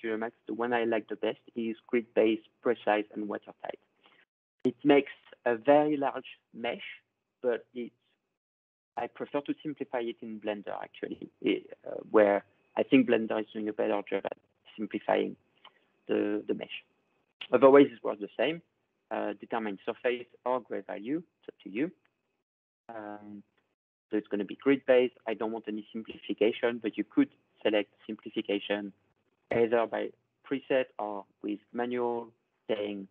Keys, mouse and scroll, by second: 3.2-6.2 drag, 27.1 click, 28.1 click, 29.1 click, 30.4 click, 31.6 click, 32.8 click.